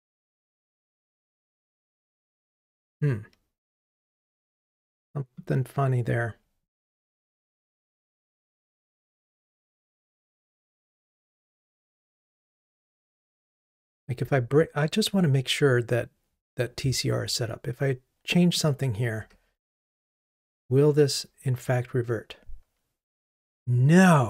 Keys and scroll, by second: 19.9 ctrl+r.